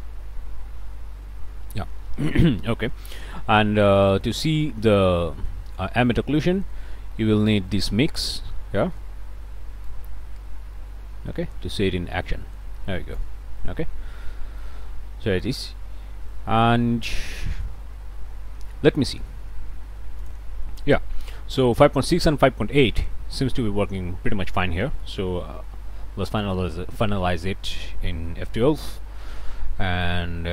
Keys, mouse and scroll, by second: 2.7-3.5 scroll up 4, 4.2 middle click, 6.0 middle click, 7.7 middle click, 8.5 scroll up 2, 8.8 middle click, 8.8 click, 9.8-13.5 drag, 13.5 middle click, 13.8-14.8 drag, 15.2 click, 15.6-16.2 scroll down 3, 15.6 middle click, 16.3 click, 20.2 click, 24.9 click, 25.5 F12.